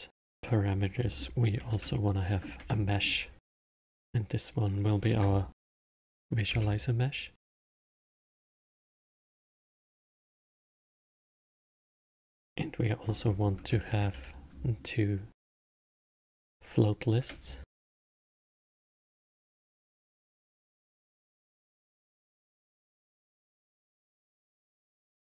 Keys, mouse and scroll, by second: 0.2-3.2 drag, 4.1-7.1 drag, 12.3-15.4 drag, 18.8-21.9 drag, 22.3 click, 23.3-25.2 drag.